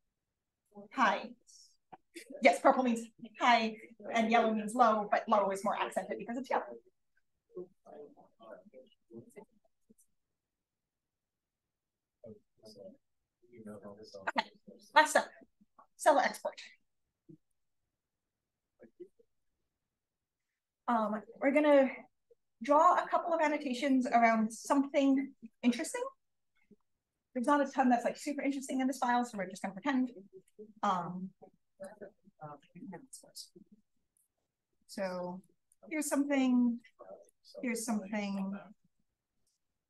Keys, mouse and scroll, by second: 18.1 click, 19.0 d, 19.3-20.9 drag, 21.5-22.5 drag, 25.6 click, 30.4-32.0 drag, 32.9 BackSpace, 34.0 click, 35.4 click, 36.7 r, 37.2-38.6 drag.